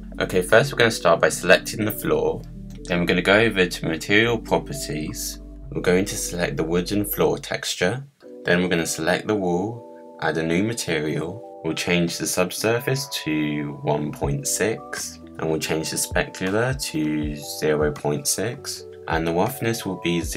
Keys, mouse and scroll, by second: 1.6 click, 3.9 click, 5.0-7.3 drag, 7.3-9.3 middle drag, 9.3 click, 11.1-15.7 drag, 16.1-20.3 drag.